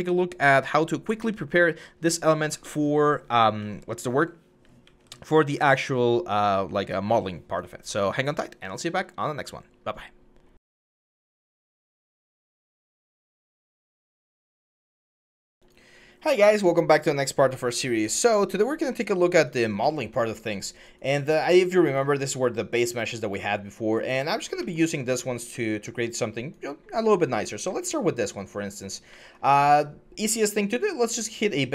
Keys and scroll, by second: 3.4-6.8 typing.